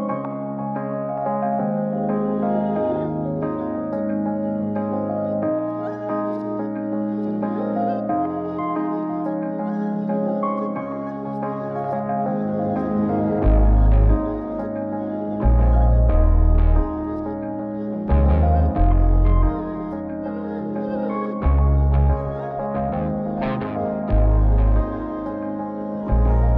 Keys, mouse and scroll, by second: 0.7 click, 2.4 click, 3.9 click, 5.0 click, 6.7 click, 8.9 click, 9.8-10.5 scroll down 3, 10.5 scroll down 2, 12.3 click, 12.8 click, 17.4 click, 20.7 ctrl+shift+click, 21.9-22.4 scroll up 3, 23.2-24.0 scroll down 3, 24.5 ctrl+shift+click, 25.1 click.